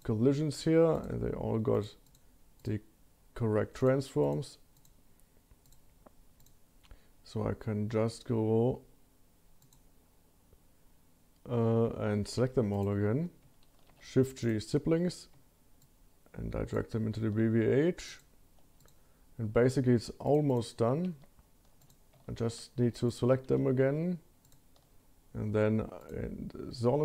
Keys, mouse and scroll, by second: 0.9 click, 2.1 click, 2.6 drag, 3.8 click, 4.2 click, 4.7 click, 5.6 click, 6.4 click, 9.6 click, 11.7-12.6 scroll down 1, 12.6 scroll down 1, 12.7 click, 14.5 shift+g, 15.8 shift+click, 18.1 shift+click, 18.8 click, 20.3 drag, 20.5 click, 20.9 shift+a, 22.4 shift+a, 23.1 click, 23.5 shift+g, 26.0 click.